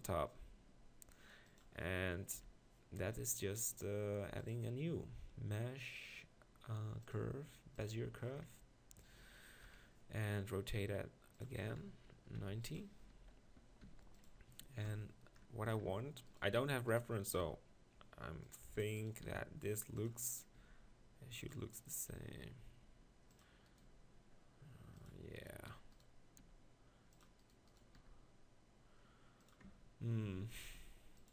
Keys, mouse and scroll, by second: 0.7 g, 1.6 click, 2.4 KP_7, 9.7 KP_1, 13.9 g, 14.9 ctrl+KP_Decimal, 15.9 Tab, 17.4 r, 19.3 r, 20.6 g, 22.1 g, 23.9 g, 26.4 r, 28.0 r, 29.6 Tab, 30.3 Tab, 30.7 r.